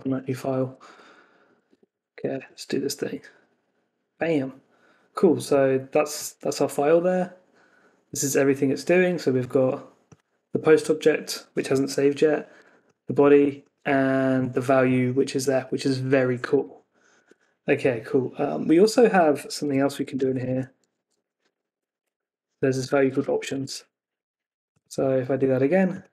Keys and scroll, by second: 1.6 super+Tab, 2.3 super+r, 16.5 super+Tab, 19.1 Escape, 23.3 Escape, 23.6 super+s, 25.2 super+r.